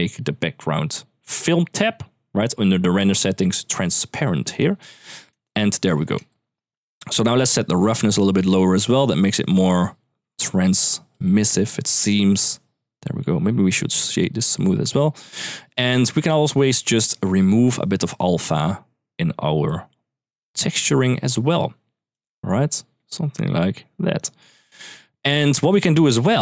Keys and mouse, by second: 1.0 click, 4.3 click, 5.4 middle drag, 6.1 shift+middle click, 7.3-10.4 drag, 10.9-13.0 drag, 13.4 click, 13.7 right click, 14.9 middle drag, 16.6-20.2 drag, 20.6 middle click, 21.9 click, 24.6 middle click, 25.3 middle click, 26.1 middle click.